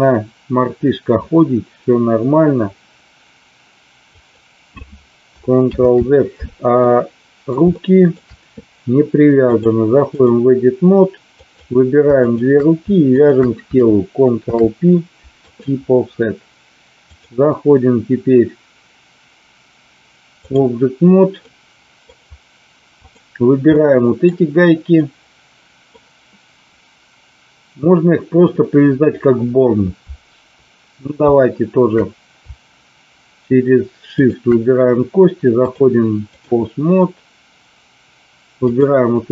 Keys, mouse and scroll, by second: 4.1 click, 5.8 ctrl+z, 6.9-7.5 middle drag, 7.6-8.1 shift+middle drag, 9.5 click, 11.5 click, 12.1 shift+click, 14.4 ctrl+p, 17.1-20.6 drag, 21.4 middle click, 23.0 click, 23.6-24.2 middle drag, 24.8-25.8 middle drag, 34.1 shift+click, 35.5-36.5 drag, 38.6 click.